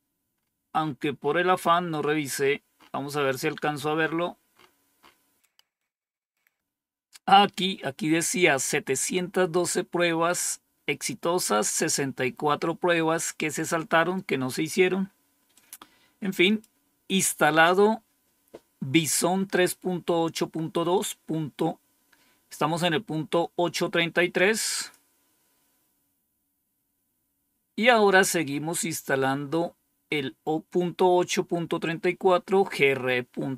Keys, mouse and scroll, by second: 0.3-5.5 scroll up 4, 5.8 click, 15.4-16.5 drag, 24.7 click.